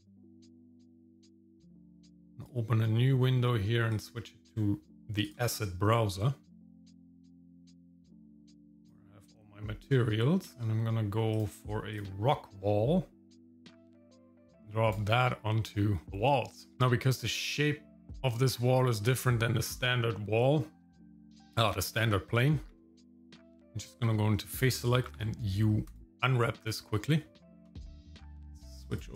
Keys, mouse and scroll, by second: 0.9-2.4 drag, 3.9-5.3 drag, 7.8-9.0 drag, 9.8 scroll down 2, 11.3 click, 11.9 click, 12.6-13.0 scroll up 2, 14.3 click, 16.0 scroll up 2, 16.4 shift+middle click, 18.9-21.9 drag, 22.7 Tab, 25.1 u.